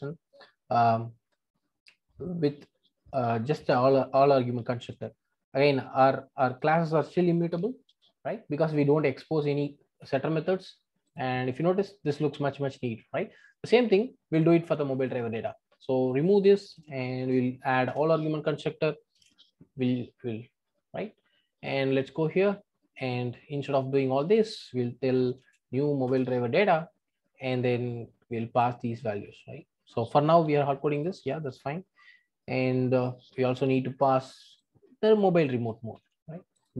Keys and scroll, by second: 3.5 super+c, 5.0 super+v, 14.4 super+b, 17.9 Return, 19.0 Return, 19.1 ctrl+alt+o, 26.1 Return, 30.4 super+x, 31.4 super+v, 35.9 super+c.